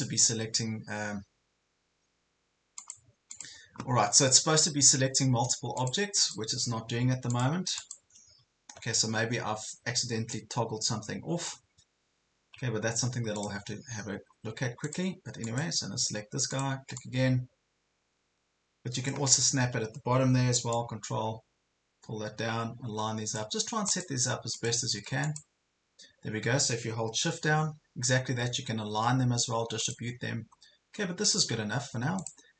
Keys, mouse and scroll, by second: 12.8 ctrl+scroll down 1, 13.4 click, 13.8 ctrl+scroll up 1, 14.4 ctrl+scroll down 1, 14.8-23.4 drag, 24.0 click, 25.2 shift+click, 29.8 click, 30.2 scroll down 1, 31.2-32.5 drag.